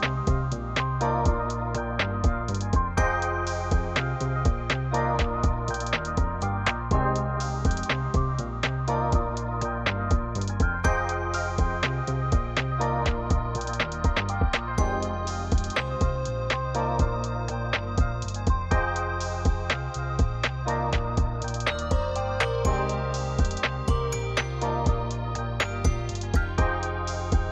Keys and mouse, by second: 1.9-3.9 drag, 2.8 KP_0, 6.3 g, 8.3 click, 9.7 click, 10.6-11.2 drag, 13.6-17.6 drag, 18.6 click, 20.1 g, 20.2 z, 22.3 click, 23.3 click, 25.8 r, 26.3 x.